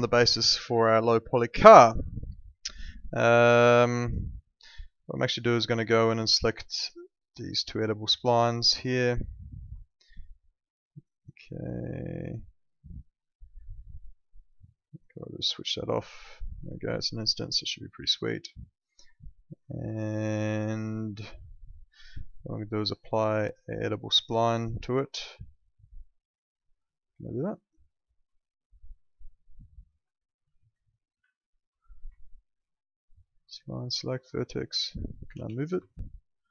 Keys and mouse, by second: 2.0 alt+middle click, 3.5 alt+middle click, 5.1 click, 9.9 ctrl+click, 17.6 click, 19.7 alt+middle click, 23.1 click, 28.1 click, 28.9 alt+middle click, 29.4 click, 30.1 alt+middle click, 30.5 w, 31.3 alt+middle click, 32.1 alt+middle click, 33.4 click, 35.1 alt+middle click, 35.3 w, 35.8 alt+middle click.